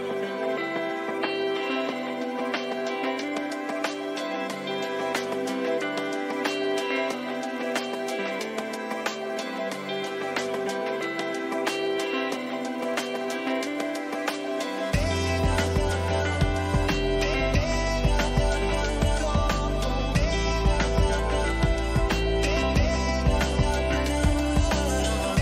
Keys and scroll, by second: 1.3 ctrl+alt+z, 3.9 ctrl+alt+z.